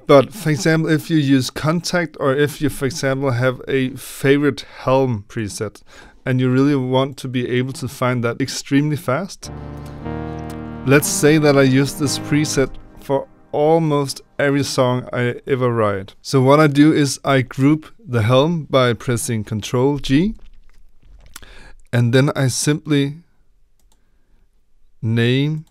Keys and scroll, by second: 20.2 ctrl+g.